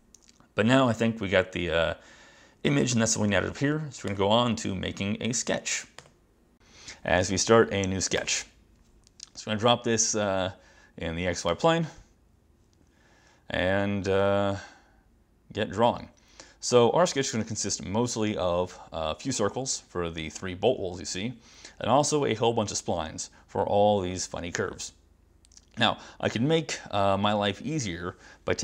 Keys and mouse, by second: 4.1 click, 6.0 click, 8.3 click, 11.6 click, 27.3 ctrl+shift+-, 27.9 -.